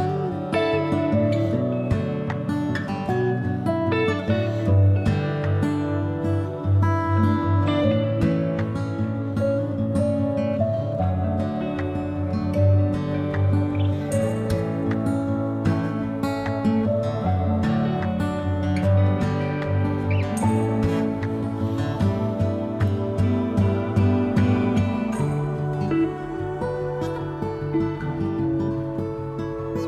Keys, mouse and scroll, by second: 1.1 o, 2.7-4.4 middle drag, 4.4-9.1 drag, 5.6 BackSpace, 9.1 middle click, 9.8-19.5 drag, 19.5 middle click, 20.2-23.9 drag, 23.9 middle click, 24.7-28.1 drag, 28.1 middle click, 28.8-29.8 drag.